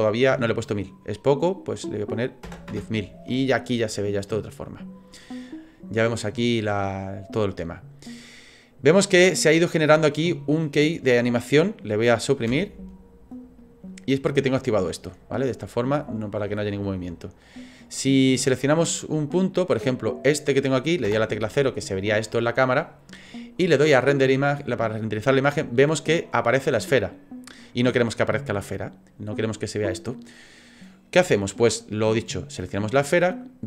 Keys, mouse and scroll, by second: 0.7 click, 3.8 middle click, 5.1 middle click, 5.5 scroll up 4, 6.2-6.6 scroll down 3, 12.5 Delete, 15.7 click, 18.8 click, 21.1 KP_0, 23.7 click, 32.6 right click.